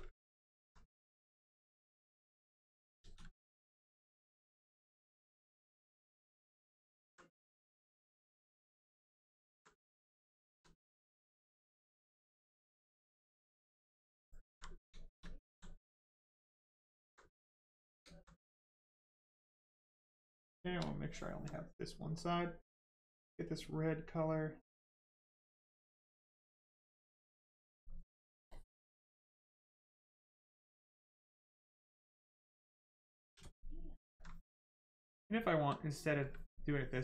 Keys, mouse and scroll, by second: 0.1 alt+right click, 0.2 alt+right click, 1.3 right click, 1.4 click, 3.0 ctrl+z, 3.7 click, 3.8 click, 7.0 alt+right click, 8.6 right click, 8.7 right click, 9.5 alt+right click, 11.1 right click, 11.1 right click, 14.1 alt+right click, 14.6 right click, 14.7 right click, 14.9 shift+right click, 15.5 alt+right click, 16.2 alt+right click, 16.4 alt+click, 16.8 alt+right click, 17.5 right click, 17.6 right click, 18.1 alt+right click, 19.0 right click, 19.1 right click, 20.6 shift+right click, 20.9 alt+right click, 22.1 click, 22.2 click, 24.7 click, 27.3 click, 31.1 click, 31.9 alt+right click, 35.0 click, 35.5 click.